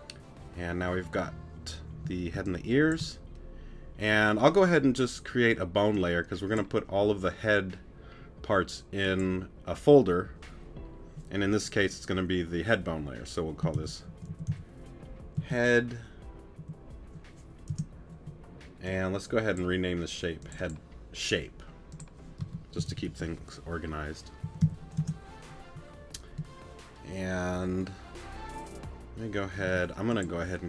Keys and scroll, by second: 2.3 space, 16.6 BackSpace, 22.4 space, 22.8 s, 24.4 p, 29.6 t.